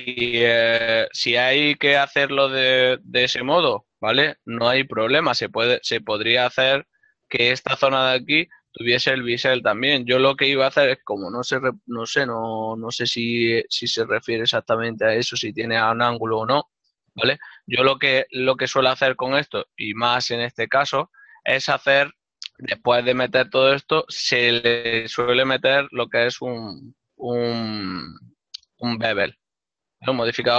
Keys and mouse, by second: 1.0 Tab, 1.2 click, 4.2 ctrl+middle click, 6.6 alt+right click, 7.2 ctrl+middle click, 8.4 middle click, 11.2 click, 14.0 alt+click, 15.0 alt+click, 18.4 click, 19.6 Tab, 20.5 click, 21.4 ctrl+middle click, 23.0 click, 25.8 click, 26.4 click, 30.4 middle click.